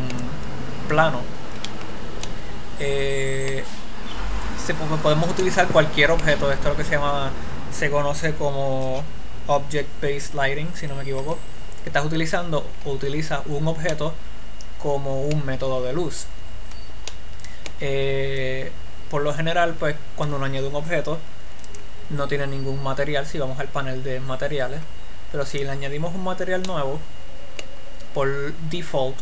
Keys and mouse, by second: 4.1-5.6 middle drag, 5.8-8.6 shift+middle drag, 14.3-16.7 middle drag, 17.5-22.1 middle drag, 22.1-24.0 drag, 26.0-27.2 drag, 27.2-29.2 middle drag.